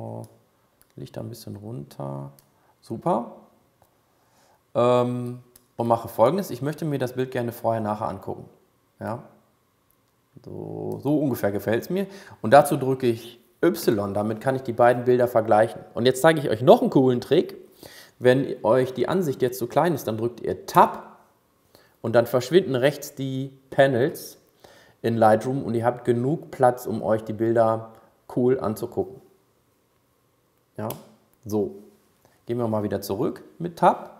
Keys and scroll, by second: 13.5 y, 20.6 Tab, 31.0 Tab.